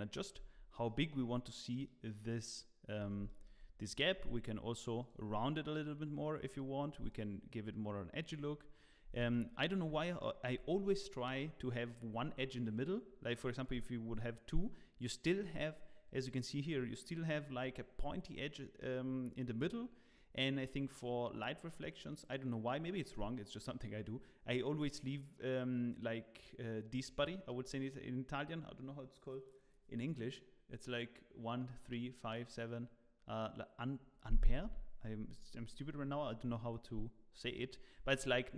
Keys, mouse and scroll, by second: 0.5 scroll down 6, 0.8 middle click, 1.7 scroll up 1, 1.8 middle click, 2.9 scroll up 2, 3.2 shift+middle click, 5.0 click, 7.1 click, 8.4-9.0 scroll up 2, 9.0 scroll up 2, 9.3 shift+middle click, 10.0 scroll up 1, 13.6 click, 21.9 click.